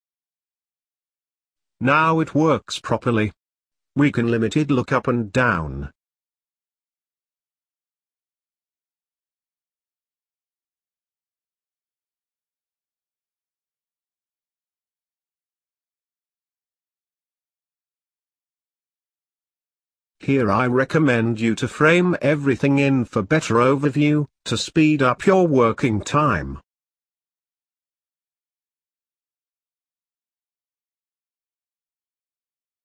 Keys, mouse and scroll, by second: 16.8 scroll down 4, 17.0-18.0 middle drag, 18.1 click, 19.5 click, 21.3 ctrl+j, 22.4 click, 24.3-28.3 drag, 31.1-32.4 drag, 32.4 scroll up 2, 32.6 middle click.